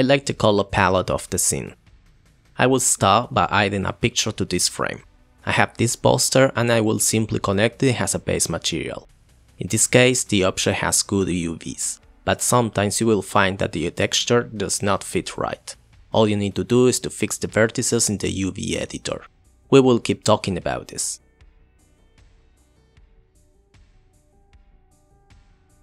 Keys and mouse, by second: 1.0 click, 3.1 click, 3.8 click, 4.0-4.4 drag, 4.9 click, 6.7-7.5 drag, 8.0-8.4 drag, 9.7-10.7 drag, 11.4 click, 12.1 click, 12.5 click, 13.8 g, 14.7 click, 14.9 g, 15.5 click, 16.0 click, 16.1 g, 17.2 click, 17.4-21.7 typing, 18.4 click, 21.2 click, 22.7 click, 24.2-24.6 drag.